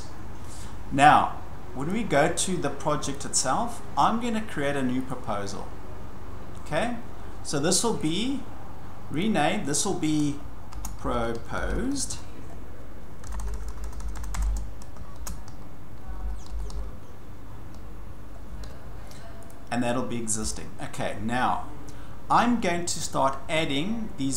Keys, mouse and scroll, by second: 1.9 click, 3.1 click, 5.1 click, 8.0 right click, 9.2 click, 10.5-18.9 typing, 14.5 Caps_Lock, 14.9 shift+click, 19.5 click, 20.5 click.